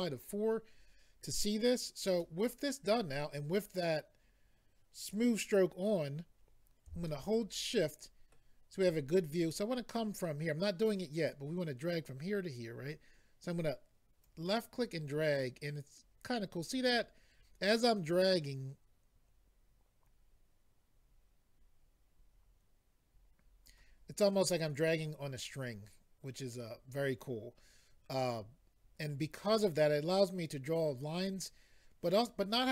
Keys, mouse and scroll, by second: 2.2 middle click, 7.0 shift+middle click, 14.2 click.